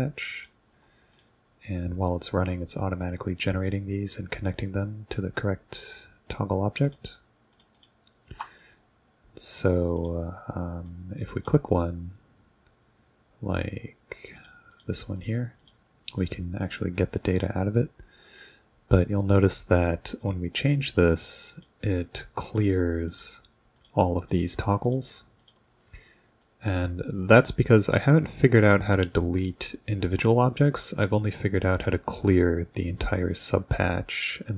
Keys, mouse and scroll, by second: 1.1 ctrl+click, 6.9 ctrl+click, 7.5 ctrl+click, 7.8 ctrl+click, 10.0 click, 10.9 click, 14.4 ctrl+click, 14.8 ctrl+click, 15.2 ctrl+click, 15.6 ctrl+click, 16.2 ctrl+click, 19.1-21.6 ctrl+drag, 22.5 ctrl+click, 23.1 ctrl+click, 23.8 ctrl+click, 24.3 ctrl+click, 24.9 ctrl+click, 25.4 ctrl+click, 26.5-30.2 ctrl+drag.